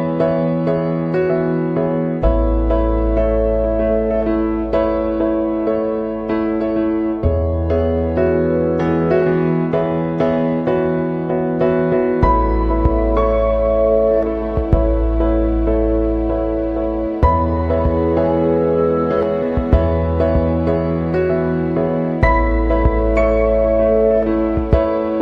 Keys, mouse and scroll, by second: 0.0 Escape, 2.6 click, 5.1 click, 9.0-9.3 scroll up 1, 10.2 scroll up 2, 11.3 scroll up 2, 14.9 click, 21.3 click, 23.3 click, 24.7 click.